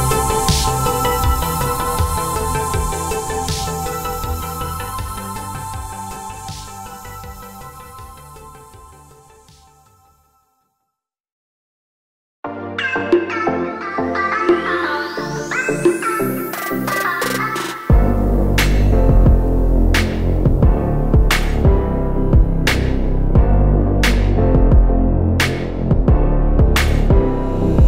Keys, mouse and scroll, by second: 0.5 click, 1.0 alt+scroll down 1, 1.8 alt+scroll up 1, 2.9 alt+click, 3.4 alt+click, 5.8 click, 6.5 click, 7.1 click, 12.4 click, 13.0 scroll down 1, 15.8 click, 19.0 click, 22.1 click, 25.0 click, 25.4 click.